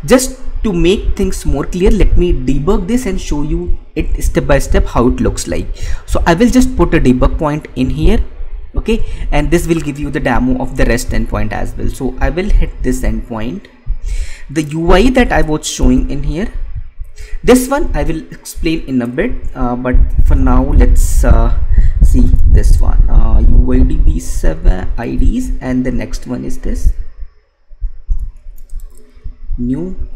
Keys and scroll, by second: 15.5 ctrl+c, 16.4 alt+Tab, 22.0 Right, 23.0 ctrl+v, 25.6 alt+Tab, 28.8 ctrl+c, 29.4 Tab.